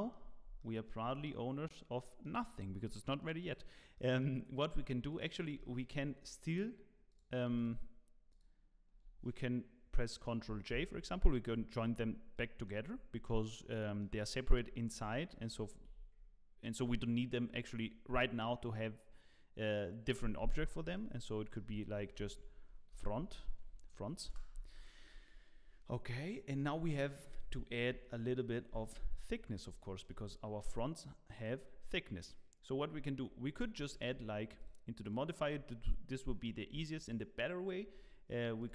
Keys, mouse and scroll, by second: 0.6 middle click, 0.6 f, 1.0 Tab, 1.2 middle click, 2.2-2.8 scroll down 1, 3.4 click, 3.9 middle click, 5.1 shift+click, 5.5 middle click, 6.2 shift+click, 7.2 click, 7.6 shift+click, 10.7 ctrl+j, 12.3 middle click, 13.1 Tab, 13.4 middle click, 14.0 Tab, 14.5 Tab, 15.0 Tab, 15.7 alt+a, 16.7 Tab, 21.9 F2, 26.2 middle click, 27.9 KP_1, 29.0 z, 29.4 scroll up 4, 29.8 shift+middle click, 30.2 scroll up 1, 33.2 scroll up 2, 33.8 shift+middle click, 34.6 click, 35.0 click.